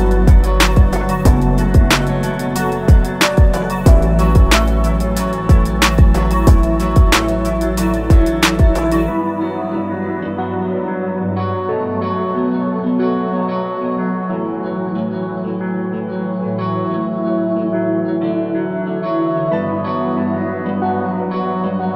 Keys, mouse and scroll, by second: 0.2 Escape, 2.0 ctrl+click, 2.5 ctrl+click, 3.6 ctrl+click, 7.8 click, 10.5 Escape, 12.8 shift+click, 14.6 click, 17.5 Escape, 19.3 click.